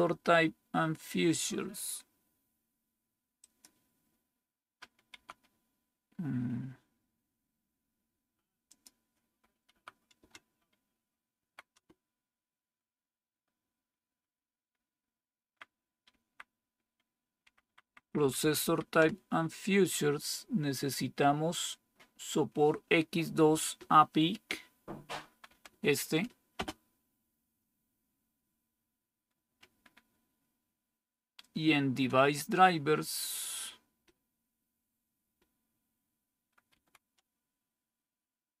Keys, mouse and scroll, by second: 5.0 Right, 9.6 Right, 10.0 Return, 11.3 Right, 11.6 Return, 14.6 Up, 15.3 Up, 15.3 Up, 15.4 Up, 15.6 Up, 17.3 Up, 17.5 Up, 17.7 Up, 17.9 Up, 18.1 Up, 18.3 Up, 18.5 Up, 18.9 Return, 25.3 End, 25.5 Down, 26.4 space, 36.5 Right.